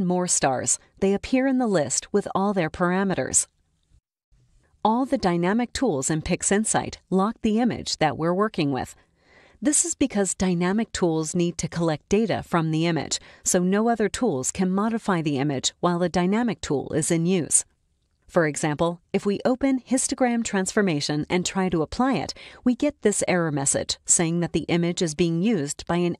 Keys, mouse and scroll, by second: 1.3-1.6 scroll up 1, 3.9 click, 13.0-14.1 drag, 14.7 click, 17.1-18.5 drag, 19.2-20.3 drag, 21.0-22.9 drag.